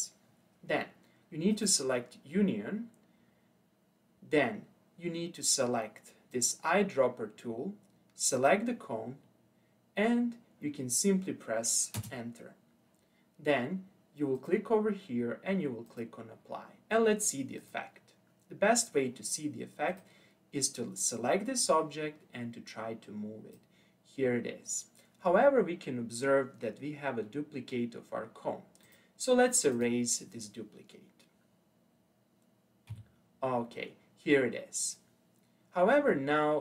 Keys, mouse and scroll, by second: 1.5 click, 6.3 click, 12.0 Return, 14.4-17.5 drag, 17.6 click, 19.9 click, 21.7 click, 28.8 click, 29.7 click, 32.9 Delete, 36.1-36.6 middle drag.